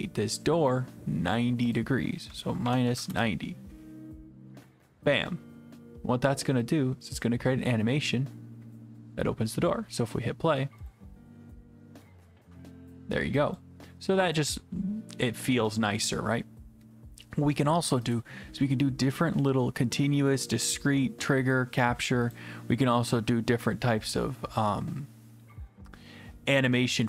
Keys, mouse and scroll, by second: 0.7 click, 1.8 click, 2.4-3.4 typing, 4.7 click, 9.1 click, 10.9 click, 13.6 click, 14.4 click, 18.1 click, 22.3 click.